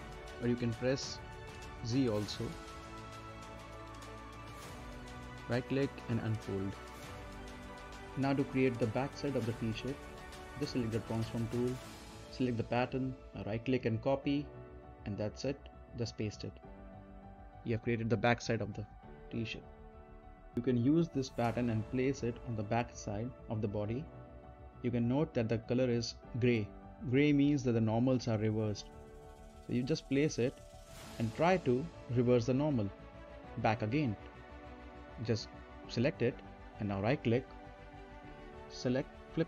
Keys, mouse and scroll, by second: 4.3 right click, 5.3 click, 7.9 middle click, 8.3 scroll down 1, 9.2-10.5 middle drag, 10.5 click, 11.5-12.0 scroll up 1, 12.0 middle click, 12.7 right click, 14.2 click, 15.5 right click, 16.3 click, 18.6 right click, 19.0-19.7 scroll up 1, 19.7 right click, 20.4 scroll down 1, 20.6-24.2 drag, 24.2 right click, 24.6 scroll down 1, 25.4 click, 26.4 right click, 27.1 middle click, 27.4 scroll down 1, 30.0 right click, 31.4 scroll down 1, 31.6 middle click, 31.9-36.0 right drag, 36.0 click, 36.9 right click, 39.3 click.